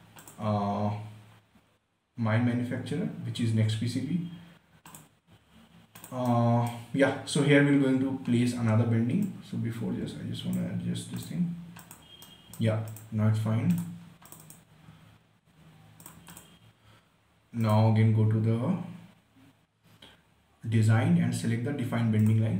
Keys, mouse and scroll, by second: 0.5 click, 5.2 click, 5.9 scroll down 1, 6.3 click, 6.6-8.6 right drag, 8.6 scroll up 1, 9.6-11.5 drag, 12.6 right click, 13.2 click, 13.7 scroll down 1, 14.1 click.